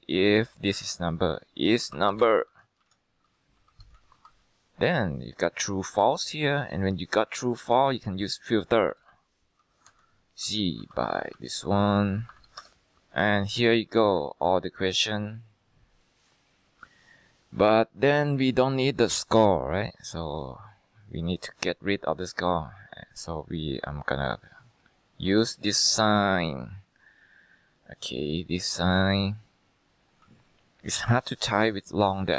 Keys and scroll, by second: 1.0-4.7 typing, 2.9 Down, 8.4-12.4 typing, 12.7 Return.